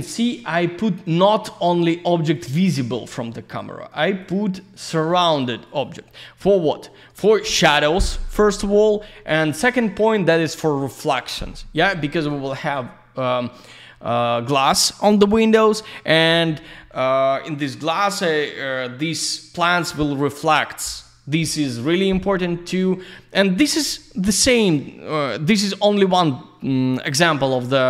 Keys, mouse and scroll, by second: 1.7 click, 2.3 ctrl+click, 2.9 alt+middle click, 4.2 click, 4.9 ctrl+click, 5.6 ctrl+click, 5.8 ctrl+double click, 7.1 ctrl+click, 25.2 click.